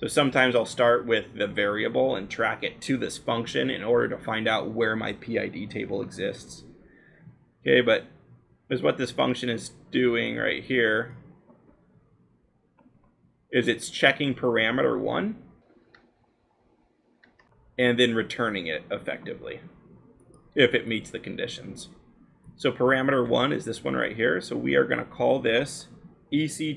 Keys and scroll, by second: 23.2 l, 25.7-26.6 typing.